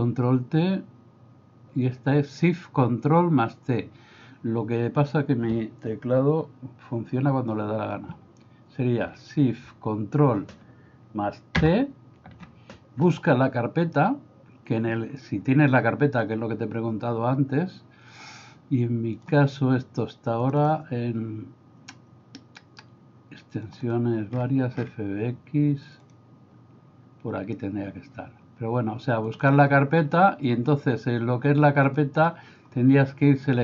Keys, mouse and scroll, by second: 11.7 ctrl+shift+t.